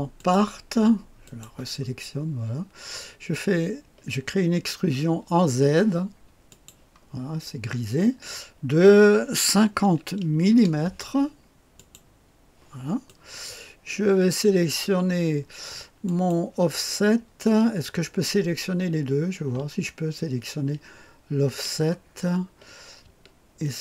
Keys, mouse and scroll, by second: 0.1 click, 1.2 click, 6.4 click, 9.7 KP_5, 10.4 KP_0, 11.7 click, 13.0-14.3 drag, 16.0 click, 22.2-23.0 scroll up 2, 23.6 ctrl+click.